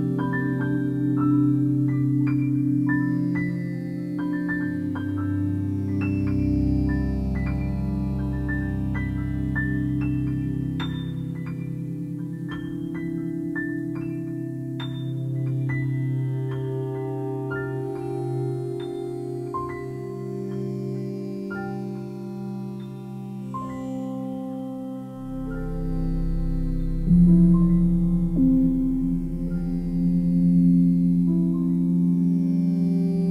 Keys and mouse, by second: 0.7 g, 1.2 z, 2.4 click, 3.0 alt+click, 4.1-4.5 typing, 5.3 click, 5.6-8.1 alt+drag, 8.9 click, 9.0 click, 9.7 click, 10.4 shift+click, 11.4 g, 11.9 z, 14.0 click, 14.3-15.9 alt+drag, 16.5 alt+click, 18.6 click, 19.6 alt+click, 21.1 alt+click, 21.5 alt+click, 22.4 alt+click, 23.5 alt+click, 23.9 alt+click, 24.4 alt+click, 25.0-28.9 alt+drag, 28.9 typing, 29.5 alt+shift+click, 30.4 alt+shift+click, 31.1-32.3 alt+drag, 32.7 alt+shift+click, 33.2 ctrl+alt+click.